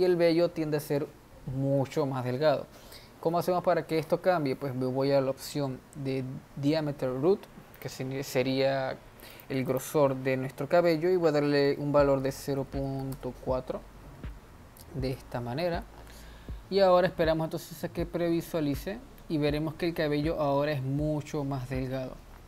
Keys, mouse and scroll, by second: 8.4-13.9 drag.